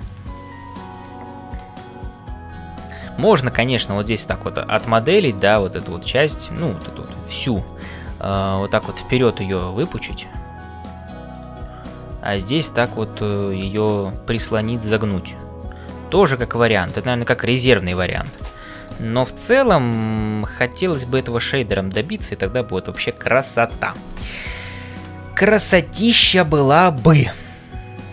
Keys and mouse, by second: 0.0 middle click, 2.5 g, 3.5 middle click, 5.3 click, 6.0 shift+click, 7.7 middle click, 11.6 middle click, 12.6 e, 14.9-16.7 middle drag, 16.8-17.8 middle drag, 17.5 e, 18.4 ctrl+KP_Add, 18.8 x, 20.8-23.4 middle drag.